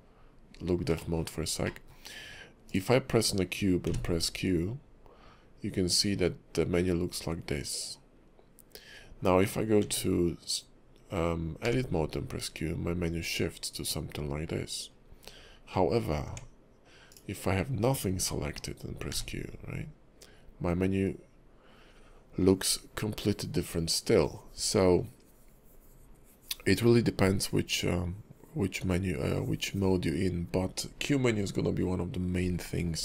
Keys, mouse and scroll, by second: 0.5-0.9 scroll down 1, 1.0 shift+middle click, 1.2-2.0 shift+scroll down 3, 1.6 middle click, 2.6 click, 3.8 q, 9.8 Tab, 11.6 q, 16.2 Tab, 17.1 click, 18.2 shift+middle click, 19.1 q.